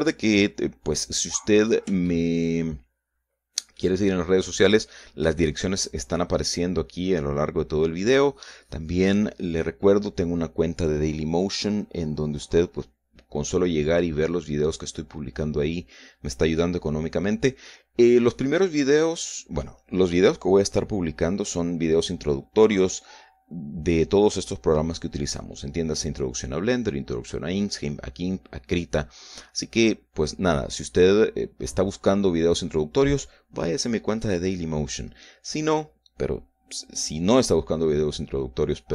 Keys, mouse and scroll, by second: 1.4-2.2 scroll up 2, 2.2 scroll down 2, 3.3-5.2 shift+middle drag, 5.4 shift+scroll down 3.